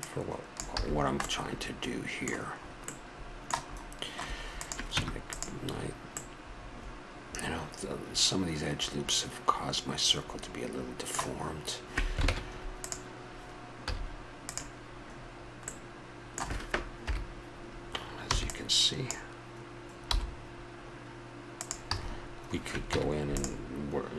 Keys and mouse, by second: 0.8 a, 1.2-2.6 middle drag, 4.6 right click, 5.0 Tab, 10.7-12.3 middle drag, 12.3 ctrl+Tab, 13.9 z, 17.0 KP_7, 18.3 b, 20.1 g, 21.9 a, 22.9 Tab.